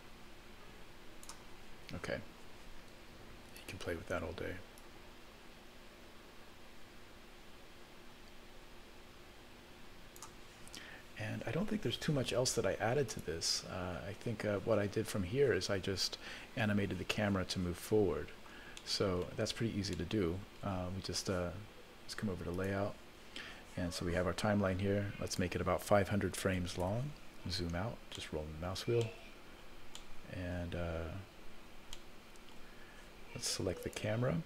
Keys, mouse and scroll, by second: 3.5 click, 4.7-10.3 drag, 13.1 click, 18.8 middle click, 19.3-19.9 scroll down 1, 19.9 middle click, 19.9 scroll down 5, 22.6 click, 25.2-26.9 drag, 26.7 KP_0, 27.4-27.8 scroll down 1, 28.1 scroll down 12, 28.1 scroll up 1, 28.2 middle click, 28.9 scroll up 1, 29.0 middle click, 29.5-30.2 scroll down 6, 29.9 middle click, 30.7-31.2 scroll up 2, 31.3-32.0 scroll up 4, 32.0 middle click, 32.8 scroll up 1, 33.8 click.